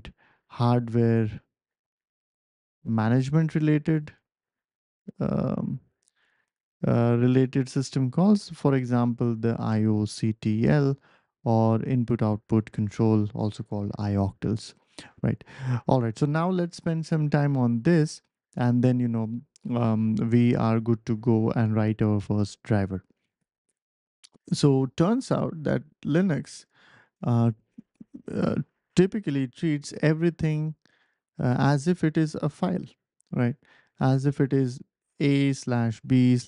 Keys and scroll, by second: 24.1 BackSpace.